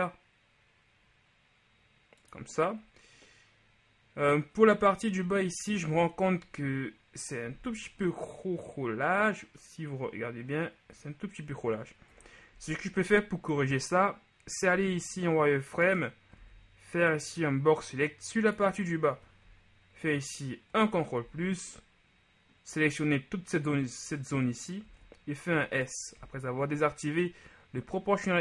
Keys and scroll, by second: 12.3 KP_3, 14.8 z, 16.5 b, 20.1 ctrl+KP_Add, 21.3 ctrl+z, 25.2 shift+s.